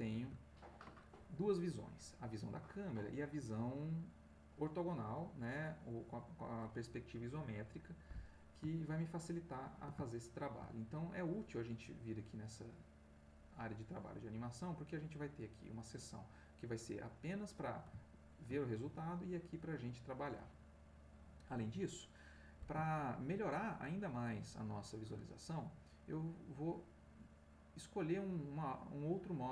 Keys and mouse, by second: 8.8-10.1 ctrl+middle drag, 10.5 ctrl+shift+middle click, 23.0-25.2 ctrl+middle drag.